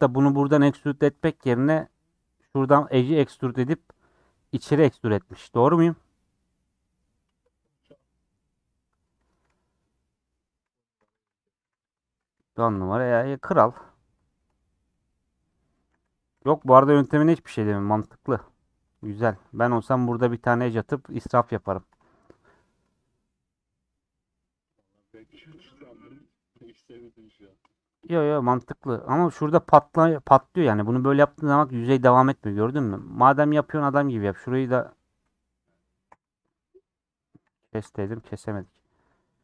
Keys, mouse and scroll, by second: 1.2 ctrl+z, 1.8 scroll down 2, 2.0-9.5 middle drag, 9.8-10.9 middle drag, 10.9 2, 11.6 3, 12.8 ;, 13.2 scroll down 4, 13.6-14.7 middle drag, 14.7 scroll down 4, 14.9 middle click, 15.2 scroll up 4, 15.5 middle click, 15.9 scroll up 2, 16.3 3, 18.0 ;, 18.3 scroll up 1, 18.4-19.7 middle drag, 19.7 ctrl+b, 21.6 ctrl+z, 22.1 scroll down 3, 22.2 middle click, 22.9 scroll, 23.0 middle click, 23.5 middle click, 24.0 scroll up 2, 24.1 middle click, 24.6 scroll down 2, 24.7-28.2 middle drag, 28.2 Tab, 28.7 middle click, 29.1-30.1 scroll up 5, 29.6 shift+middle click, 30.1 middle click, 30.7-31.0 scroll up 2, 31.5-32.9 middle drag, 32.9 Tab, 33.2 3, 33.4 click, 33.7 2, 33.9 click, 34.1 v, 36.1 v, 37.7 ctrl+z, 38.0-39.3 middle drag, 39.3-39.4 scroll down 1.